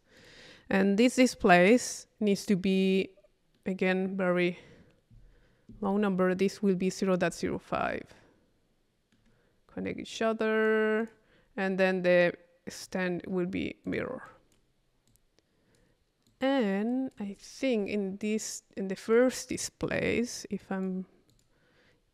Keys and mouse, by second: 0.2 click, 3.6 middle click, 9.6 middle click, 10.1-11.6 drag, 12.8 click, 13.8-14.9 drag, 15.1 click, 16.3-17.6 drag, 19.0 click.